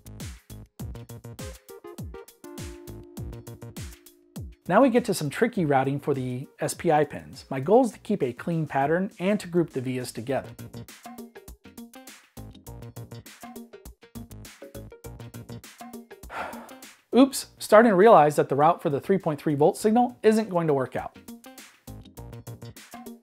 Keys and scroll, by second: 3.6 -, 6.1 v, 7.5 v, 8.6 v, 10.3 -, 11.3 v, 13.6 v, 15.0 -, 16.5 v, 17.4 -, 17.7 super+s, 19.1 Escape, 22.7 super+z.